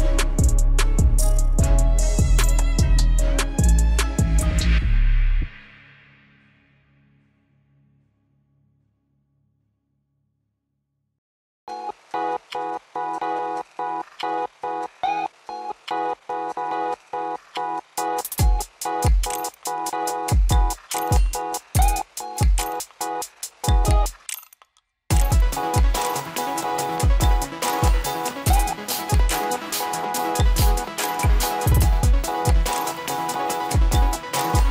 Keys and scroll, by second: 3.7 F4, 18.6 F4.